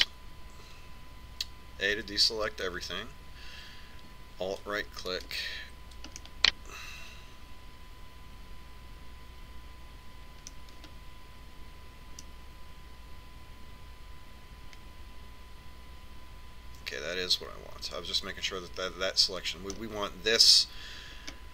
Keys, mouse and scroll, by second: 3.2 a, 6.4 right click, 7.4-9.5 middle drag, 12.0-15.4 middle drag.